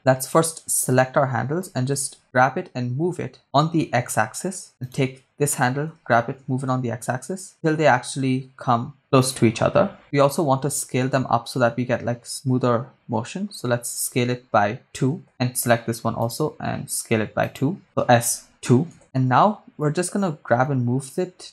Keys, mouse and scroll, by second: 1.9 g, 3.5 x, 4.7 ctrl+click, 4.9 right click, 5.9 g, 6.5 x, 9.3 ctrl+click, 10.0 right click, 10.7 s, 14.4 2, 15.2 Return, 16.2 right click, 17.4 click, 17.4 right click, 18.2 2, 18.2 s, 18.2 2, 19.0 Return, 20.1 click.